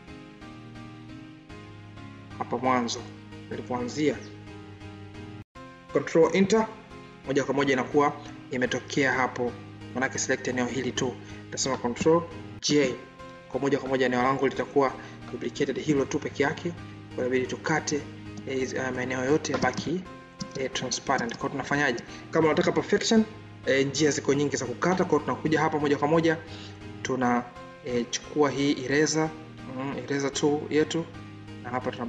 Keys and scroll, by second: 5.1 ctrl+Return, 12.5 ctrl+j.